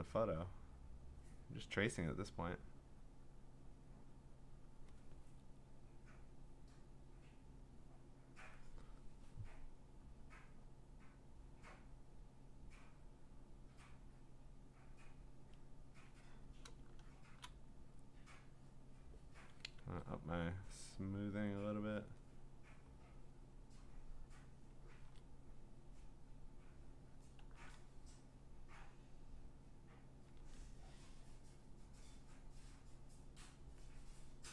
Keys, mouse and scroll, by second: 0.0 click, 0.8 click, 1.1 click, 1.7 click, 1.9 click, 2.6 click, 2.9 click, 3.1 click, 3.3 click, 4.3 click, 4.4 click, 4.7 click, 5.0 click, 7.6 click, 8.0 click, 8.3 click, 10.1 click, 10.7 click, 11.2 click, 12.2 click, 13.1 click, 13.5 click, 14.3 click, 15.2 click, 15.8 click, 17.2 scroll, 17.3 click, 19.0 click, 19.8 ctrl+z, 20.6 click, 22.1 click, 24.6 click, 24.9 ctrl+z, 27.1 click, 27.4 ctrl+z, 30.0 click, 30.4 ctrl+z, 33.6 click.